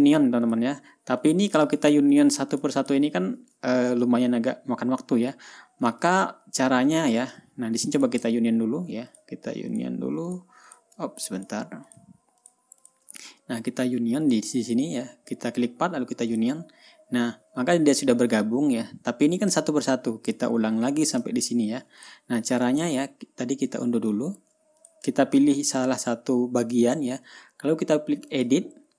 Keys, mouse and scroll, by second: 0.2 ctrl+y, 1.0 click, 1.7 click, 2.3 shift+click, 2.7 shift+click, 3.1 shift+drag, 3.4 shift+drag, 4.2-4.5 ctrl+scroll down 2, 5.6-5.9 ctrl+scroll up 2, 6.0 ctrl+scroll down 2, 6.6 ctrl+drag, 8.0 ctrl+scroll up 1, 8.5 ctrl+shift+click, 9.6 shift+click, 10.3 shift+drag, 10.8 shift+drag, 11.2 shift+click, 11.9 shift+click, 12.4 shift+click, 12.9 shift+click, 13.3 shift+click, 14.8 click, 16.8 click, 20.0 ctrl+scroll down 2, 21.0 ctrl+scroll up 2, 21.8 ctrl+scroll down 1, 22.5 ctrl+drag, 23.3 ctrl+y, 24.2 ctrl+scroll up 1, 24.6 ctrl+y, 25.3 ctrl+click, 25.7 ctrl+scroll down 2, 28.8 click.